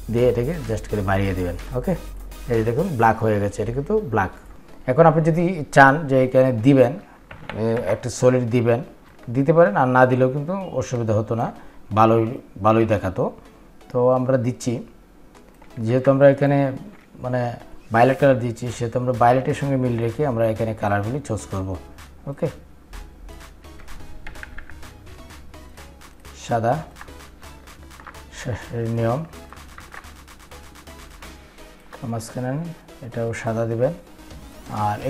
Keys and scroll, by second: 7.3 ctrl+f.